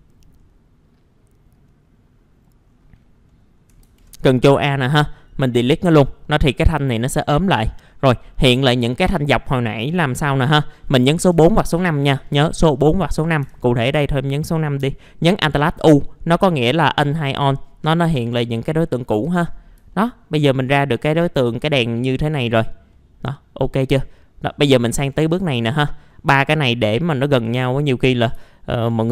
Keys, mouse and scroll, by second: 3.3 middle click, 3.8 ctrl+a, 4.4-5.6 scroll down 1, 5.6 Delete, 6.2 scroll down 1, 7.3 middle click, 7.5 scroll down 1, 11.2 4, 13.4 5, 14.2 middle click, 16.6 alt+u, 17.6-18.0 scroll up 1, 18.3-18.9 scroll up 1, 18.9 scroll down 1, 19.1 F4, 19.5 scroll down 1, 19.7 scroll up 1, 19.9-21.6 alt+middle drag, 22.2-22.6 scroll down 2, 22.3 middle click, 22.9 middle click, 24.4 click, 25.5 middle click, 26.0-26.3 scroll up 1, 26.3 click, 28.1 middle click, 28.5 alt+middle click, 29.0 scroll up 1.